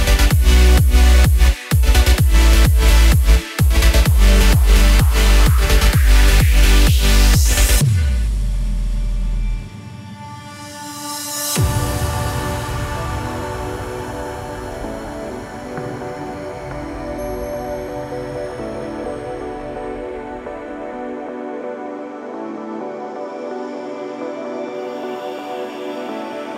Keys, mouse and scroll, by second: 0.0 click, 0.3 click, 1.4 shift+middle click, 1.5 shift+middle click, 1.7-2.1 scroll down 25, 2.1 shift+middle click, 2.5 middle click, 2.8 click, 3.8 click, 4.4 click, 5.3-6.0 scroll down 12, 5.7 click, 6.1 click, 6.7 click, 7.3 middle click, 7.6 shift+middle click, 7.8 scroll up 5, 8.0 shift+middle click, 8.4 middle click, 8.6 KP_0, 8.9 space, 9.7 space, 10.5 click, 11.1 click, 11.6 click, 11.9 click, 12.2 space, 12.5 space, 12.9 scroll up 4, 13.2 click, 13.5 KP_0, 13.9 space, 15.1 space, 15.4 scroll down 3, 15.7 click, 15.9 space, 16.6 space, 17.0 click, 17.1-17.8 scroll down 5, 17.8 click, 18.1 space, 18.6 space, 19.2-19.5 scroll up 12, 19.9 click.